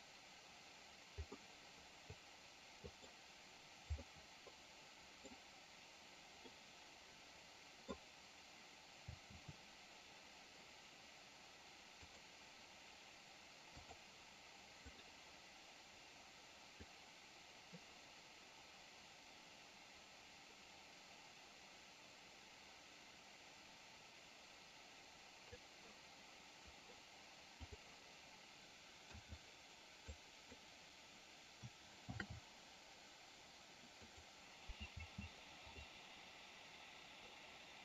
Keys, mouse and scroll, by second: 1.2-3.0 middle drag, 4.0-5.2 middle drag, 6.3-7.9 middle drag, 11.9 click, 12.5 click, 13.7-15.0 drag, 16.8-25.5 drag, 30.0 click, 32.1 shift+d.